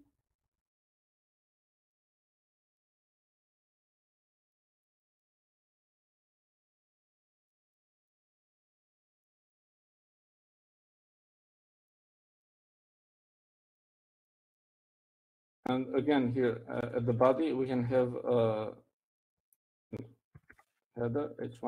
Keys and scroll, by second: 0.0 Up, 0.5 Right, 0.6 Right, 1.1-2.3 Right, 3.0 Right, 3.3 Right, 4.6 typing, 6.1-21.6 typing, 7.3 alt+c.